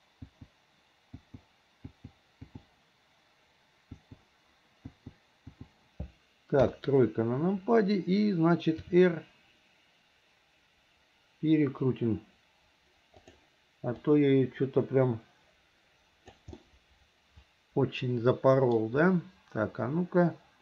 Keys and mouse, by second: 0.4 click, 1.4 click, 2.1 click, 2.6 click, 4.1 click, 5.1 click, 5.7 click, 6.8 KP_3, 8.9 r, 14.2-16.6 drag, 16.8-18.9 middle drag.